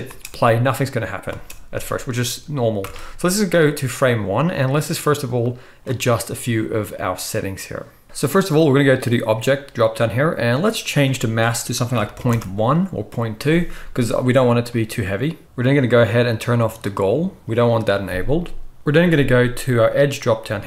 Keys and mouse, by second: 0.0 space, 1.3 space, 2.8 shift+Left, 4.9 click, 15.4-16.8 middle drag, 15.4-16.8 right drag, 16.9-20.6 right drag, 18.0-20.6 middle drag, 19.9-20.6 drag.